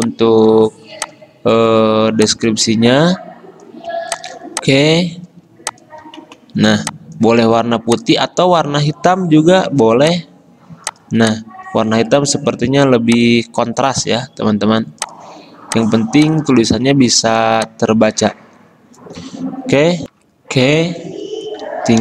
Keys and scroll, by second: 9.1 d, 13.9 d, 20.2 F10.